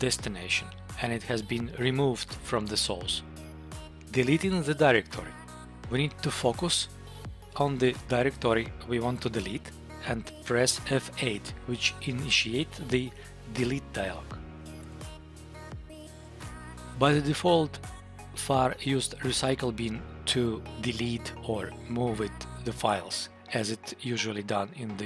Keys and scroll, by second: 1.0 Tab, 6.3 Tab, 7.5 Up, 14.8 F8.